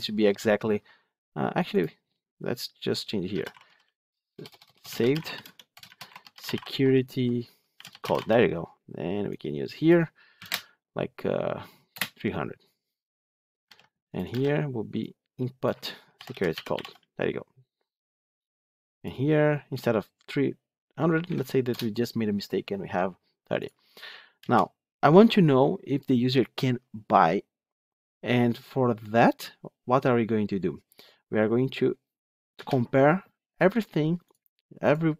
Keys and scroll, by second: 13.6 ctrl+c, 14.2 ctrl+v.